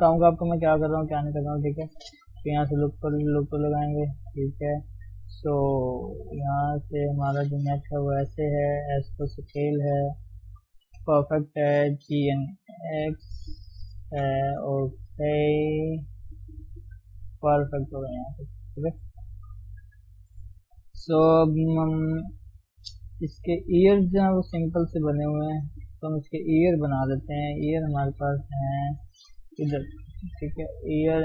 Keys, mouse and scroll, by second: 0.7-1.4 scroll up 1, 1.4 shift+middle click, 2.3 ctrl+r, 3.0 shift+z, 5.2-6.0 scroll down 1, 6.0 shift+middle click, 6.2-7.1 scroll up 1, 7.1 click, 7.8 r, 8.8 s, 10.0 g, 11.0 KP_1, 12.2 s, 14.1 shift+z, 14.3 Tab, 14.7-15.0 scroll down 2, 15.0 scroll up 1, 15.3 Tab, 15.5-16.0 scroll up 2, 16.1 s, 17.6 Left, 18.6 s, 19.3 Tab, 19.5-20.2 scroll down 1, 20.2 shift+middle click, 20.5-20.8 scroll up 1, 20.8-22.1 middle drag, 22.1 KP_3, 22.5-23.4 scroll down 2, 23.4-23.8 scroll down 2, 23.8 KP_1, 24.3-24.8 scroll up 3, 24.8 shift+z, 25.1 shift+middle click, 25.5 shift+scroll up 1, 25.6 shift+z, 26.0 middle click, 26.5 KP_3, 26.7-27.2 scroll up 1, 27.2 click, 28.4 shift+z, 29.0-30.5 shift+middle drag, 30.5-31.2 drag.